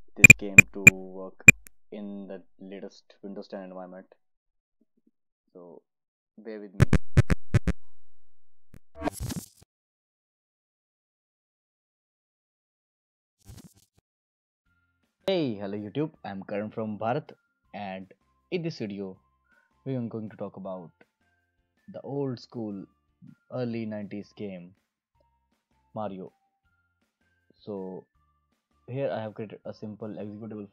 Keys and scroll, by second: 0.0 alt+Left.